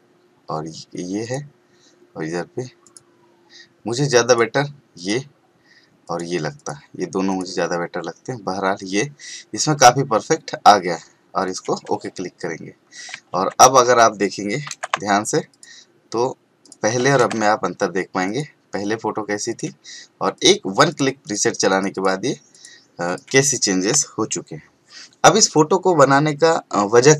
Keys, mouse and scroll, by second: 5.3 click, 11.4 click, 13.3 ctrl+a, 14.9 c, 15.5 click, 17.1 ctrl+v, 18.2 click.